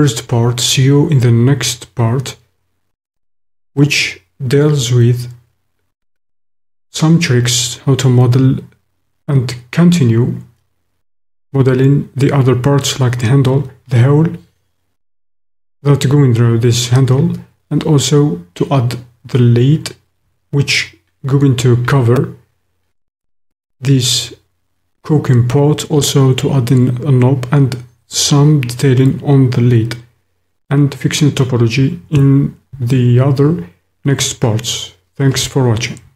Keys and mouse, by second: 36.0 shift+middle click.